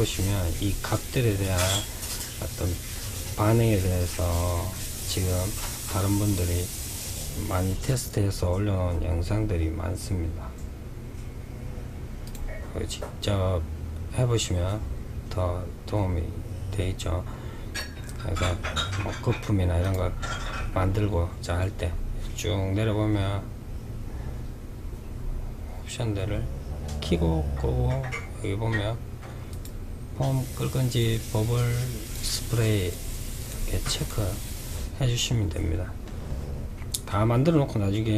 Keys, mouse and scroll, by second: 11.3 click, 18.9 click, 19.4-20.6 scroll down 5, 20.6-22.6 scroll down 10, 22.9-23.5 scroll up 2, 23.9-25.3 scroll up 7, 25.3 scroll up 2, 26.1-27.9 scroll up 2, 28.6 click, 30.0 click, 31.1 click, 31.9 click, 32.5 click, 33.1 drag.